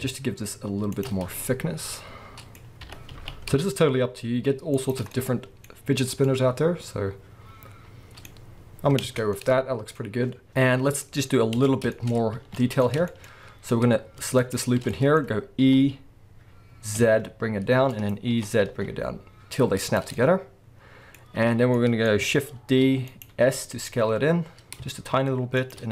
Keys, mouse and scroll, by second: 1.0 shift+click, 1.2 scroll down 2, 1.4-4.9 middle drag, 2.8 g, 4.9 shift+click, 5.1-6.8 middle drag, 5.7-6.2 scroll up 2, 8.9-9.3 scroll down 4, 9.0 Tab, 9.3 middle click, 11.6 Tab, 11.9 shift+middle click, 12.1 scroll up 2, 12.4 alt+a, 12.8-13.9 scroll up 4, 13.1-14.4 shift+middle drag, 13.9-14.4 scroll up 1, 14.4 alt+shift+click, 14.9-18.1 middle drag, 15.7 e, 18.1 click, 18.3 e, 19.9 click, 20.1-23.2 middle drag, 21.1-21.7 scroll up 2, 21.7 scroll up 1, 22.6 shift+d, 23.2 right click, 23.4 s, 25.7 shift+click.